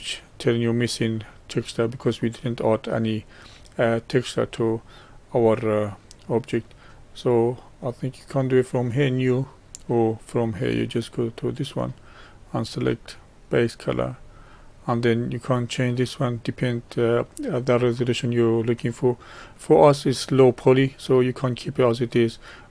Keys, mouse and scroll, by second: 2.4-8.3 middle drag, 12.1-15.2 drag.